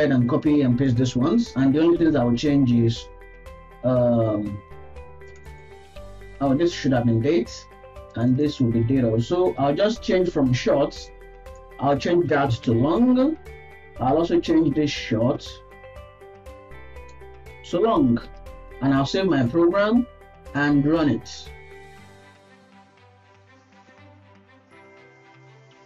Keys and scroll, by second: 1.1 ctrl+s, 1.6 Right, 2.2 ctrl+v, 9.5 ctrl+s, 18.7 ctrl+s.